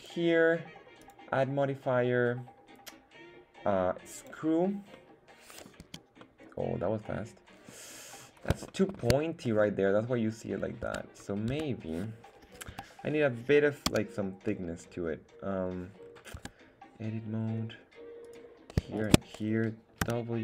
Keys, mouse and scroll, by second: 1.0-4.3 drag, 4.9-5.6 middle drag, 5.8 z, 6.2-7.7 middle drag, 8.1-8.6 scroll up 3, 8.7 shift+middle click, 9.7-10.9 middle drag, 10.9 Tab, 11.8 Tab, 12.8 KP_1, 13.9 z, 16.0-16.4 scroll down 2, 16.4 Tab, 18.2 right click, 19.0 shift+right click, 20.0 w.